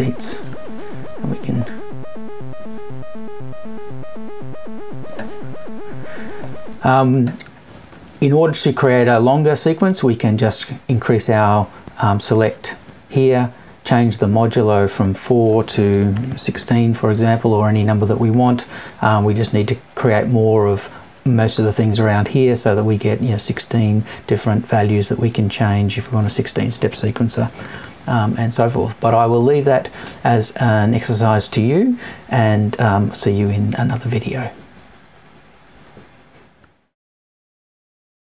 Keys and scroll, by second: 15.9 BackSpace, 27.4 BackSpace.